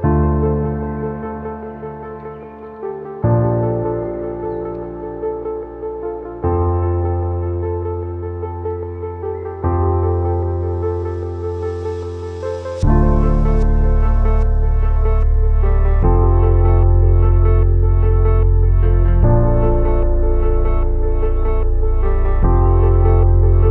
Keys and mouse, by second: 5.4-13.9 middle drag, 14.5-16.2 drag, 16.8-20.3 drag.